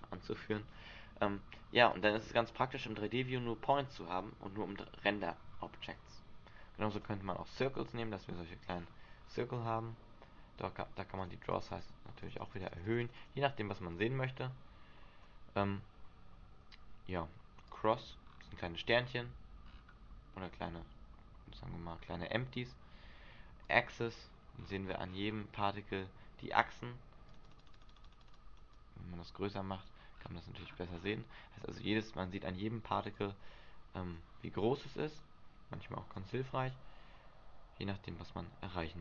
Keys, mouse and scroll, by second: 7.1 click, 7.6-9.1 scroll up 17, 9.1-10.0 scroll down 11, 10.0 scroll down 4, 11.3 click, 11.7 click, 11.9 click, 12.6 click, 12.9 click, 13.0 click, 13.4 click, 14.1 click, 17.8 click, 18.3-19.2 scroll up 5, 19.2-19.7 scroll up 11, 19.7-20.4 scroll down 4, 20.4 middle click, 20.4 scroll down 3, 21.7-23.8 scroll up 7, 23.8 click, 24.3-24.9 scroll down 7, 24.9-26.1 scroll up 18, 27.4 click, 27.6 click, 27.9 click, 28.1 click, 28.4 click, 28.5 click, 30.3 click, 30.3-33.3 scroll down 19, 33.3 click, 33.3 scroll down 1, 34.7 scroll down 3, 36.3 click, 36.9 click.